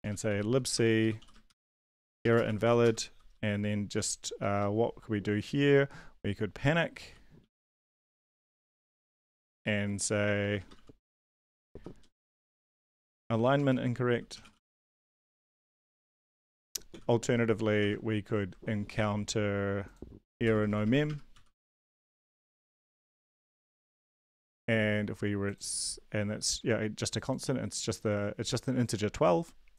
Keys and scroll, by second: 0.0-3.9 typing, 6.8-16.9 typing, 9.3 Tab, 17.8 shift+Home, 20.4-22.8 typing.